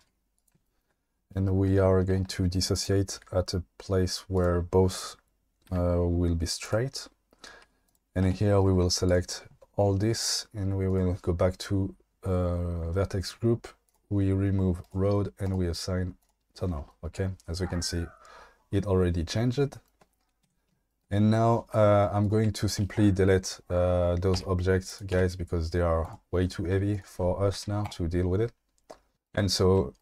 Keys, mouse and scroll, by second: 0.0 g, 3.1 g, 4.3 click, 5.7 v, 6.6 click, 7.6 2, 7.9 click, 9.1 ctrl+click, 13.9 click, 20.4 Tab, 24.4 Delete, 25.1 Delete, 26.0 click, 26.9 click, 27.5 q.